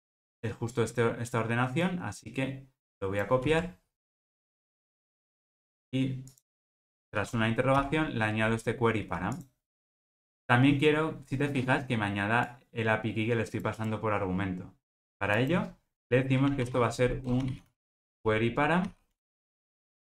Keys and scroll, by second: 7.8 super+v.